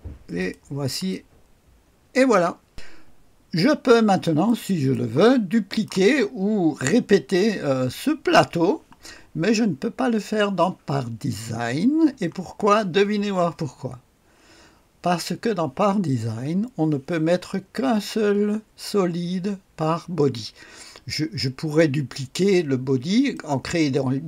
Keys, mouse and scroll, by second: 0.3-2.7 drag, 3.6-4.5 scroll up 1, 4.5-6.4 drag, 5.2 right click, 9.3-10.0 scroll down 1, 23.3 click.